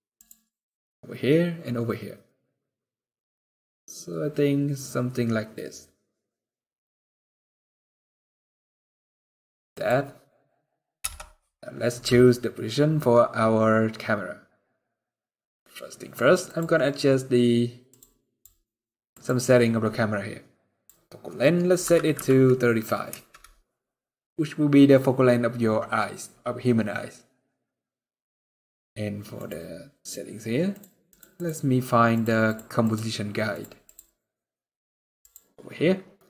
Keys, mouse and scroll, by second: 1.9 scroll down 4, 2.1 middle click, 9.5 click, 10.8 scroll down 5, 10.8 KP_0, 11.6-12.5 scroll up 1, 12.5-12.9 scroll up 1, 13.8-15.0 scroll up 1, 15.0 scroll down 1, 15.3-16.2 scroll up 1, 16.2 click, 17.6 click, 29.1 click, 30.5-33.2 click, 35.2-35.7 scroll down 10.